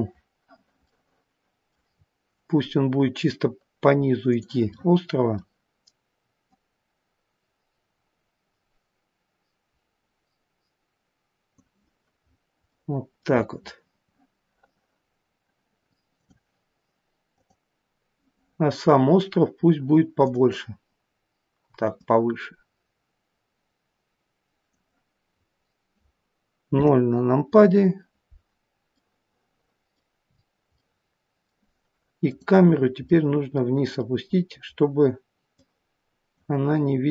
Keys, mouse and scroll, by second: 1.0 middle click, 1.9 scroll down 4, 4.2 click, 4.8 middle click, 6.3 click, 12.1-12.6 scroll up 4, 12.6 middle click, 13.3 scroll down 3, 16.0 click, 17.3 click, 25.3 scroll down 3, 26.7 KP_0, 29.0 middle click, 30.2-30.9 scroll down 5, 30.7 middle click, 32.2 click, 32.6 scroll down 2, 33.1 middle click, 33.9 middle click, 34.7 scroll down 2, 35.4 click.